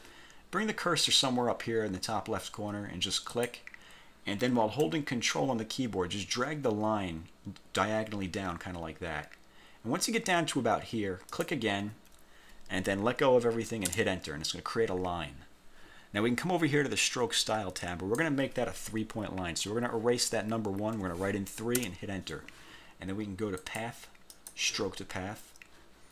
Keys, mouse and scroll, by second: 3.4 click, 11.4 ctrl+click, 14.0 Return, 17.9-18.5 drag, 21.0 3, 21.9 Return, 23.7 click, 24.4 click.